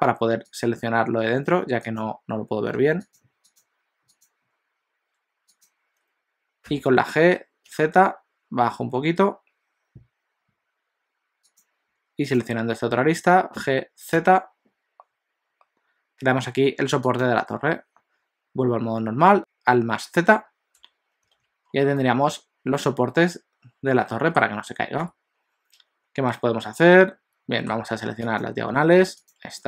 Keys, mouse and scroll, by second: 0.6 click, 1.6 2, 1.8 click, 2.8 alt+a, 3.1 click, 3.5 click, 6.6 g, 12.4 click, 13.7 g, 19.4 alt+z, 20.8 Tab, 21.4 alt+a, 21.6 scroll down 2, 22.0 middle click, 26.6 middle click, 28.2 click, 29.4 shift+click.